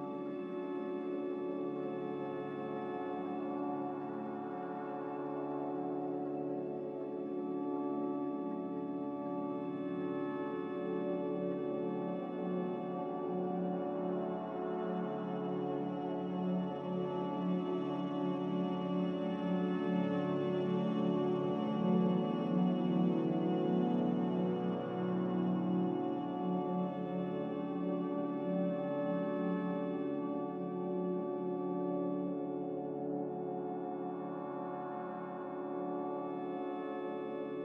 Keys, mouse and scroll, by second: 4.1 r, 8.2 a, 14.6 Escape, 19.4 typing, 19.6 Return, 30.0 ctrl+z, 30.4 ctrl+z.